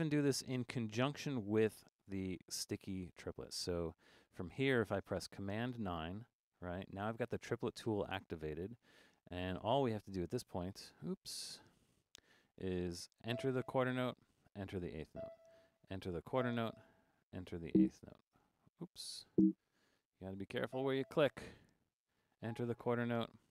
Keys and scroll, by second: 0.5 5, 5.7 super+9, 9.1 5, 11.3 5, 14.3 4, 15.5-16.9 typing, 21.9 5, 23.0-23.5 typing.